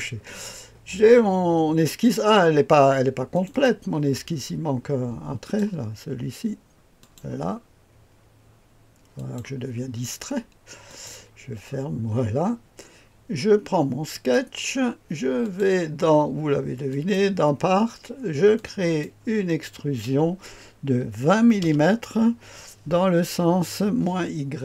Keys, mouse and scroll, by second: 3.3 click, 5.4 click, 7.0 click, 9.1 click, 10.8 click, 14.1 click, 15.4 click, 16.9 click, 18.5 click, 21.2 KP_2, 21.6 KP_0.